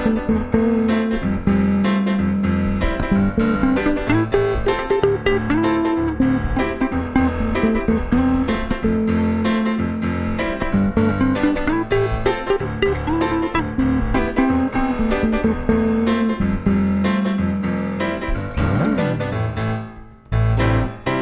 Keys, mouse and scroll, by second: 1.4-4.0 middle drag, 4.0-7.2 drag, 11.9-16.7 drag, 19.1-21.1 drag.